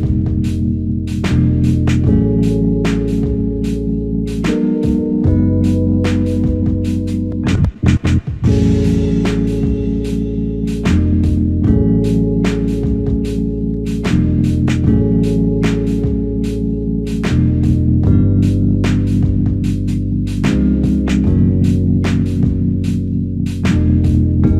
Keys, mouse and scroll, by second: 6.8 alt+click.